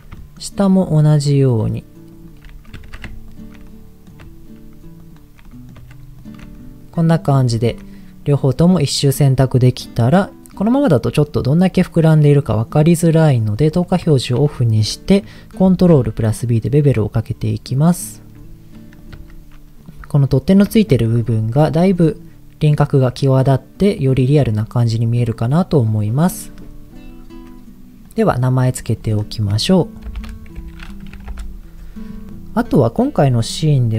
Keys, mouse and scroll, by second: 0.2 shift+middle click, 1.5 alt+shift+click, 2.8 ctrl+z, 3.3 alt+shift+click, 3.6 middle click, 5.0 shift+click, 5.4 middle click, 6.2 alt+shift+click, 6.5 middle click, 7.0-7.5 scroll down 3, 7.5 shift+middle click, 11.0-12.8 middle drag, 13.6 click, 14.0 shift+middle click, 15.6 ctrl+b, 19.0 click, 19.1 Tab, 19.7 middle click, 21.1 ctrl+shift+z, 23.2-24.4 middle drag, 24.6-25.0 scroll down 1, 25.0 middle click, 25.4 click, 26.4 middle click, 28.0 click, 29.0 click, 29.1-31.4 drag, 32.4 middle click.